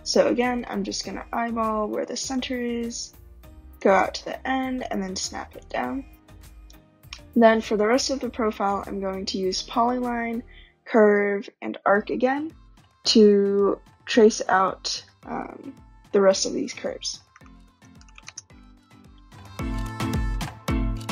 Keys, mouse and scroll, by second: 1.3 typing, 2.2 click, 3.8 click, 5.6 click, 6.1 scroll, 7.0 right click, 9.2-9.6 scroll, 11.8 right click, 17.0-18.6 typing, 20.0 click, 20.0 typing, 20.4 click, 20.8 shift+click, 20.9 click.